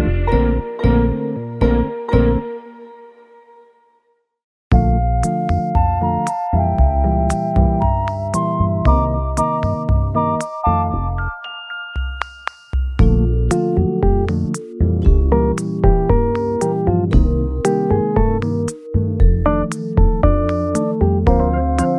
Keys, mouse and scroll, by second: 2.4 s, 2.5 e, 4.8 s, 4.8 s, 8.0 g, 11.6 g, 13.2 g, 14.4 scroll down 1, 14.7 middle click, 15.3 alt+z, 15.6 alt+middle click, 16.4 shift+middle click, 17.4 alt+z, 17.7 scroll, 17.7 scroll up 2, 19.1 shift+click, 19.5 shift+click.